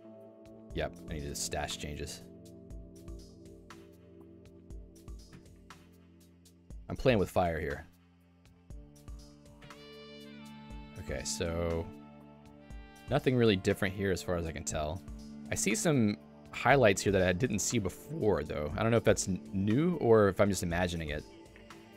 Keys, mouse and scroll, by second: 6.5 super+1.